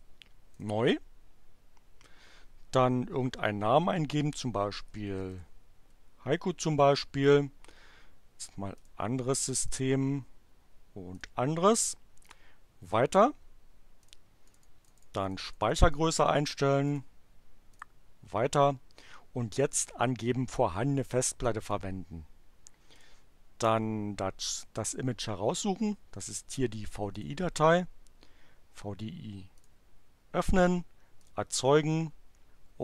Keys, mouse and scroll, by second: 0.5 click, 4.1-5.7 typing, 7.2 click, 8.7 click, 9.6 click, 11.1 click, 12.2 click, 14.0 click, 14.5 click, 16.8 click, 17.7 click, 21.6 click, 22.9 click, 27.1 click, 29.5 click, 31.2 click.